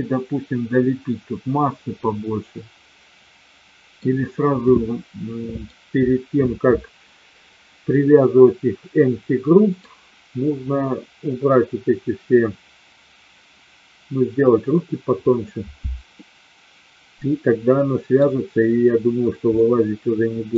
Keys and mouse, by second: 2.0-3.9 middle drag, 4.6-5.6 middle drag, 7.9-9.6 middle drag, 16.1-18.1 middle drag, 19.5-20.5 middle drag.